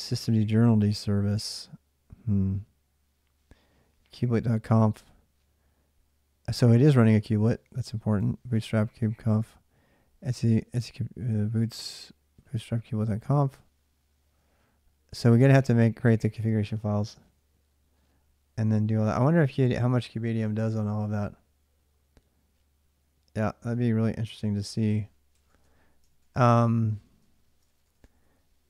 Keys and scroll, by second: 24.3 ctrl+a, 24.5 ctrl+a, 24.9-28.3 typing, 25.9 ctrl+a, 26.0 ctrl+a.